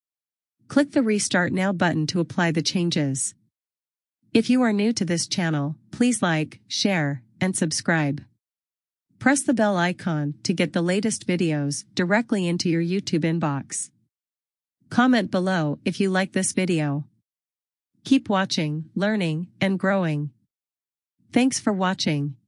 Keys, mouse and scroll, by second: 8.0 click.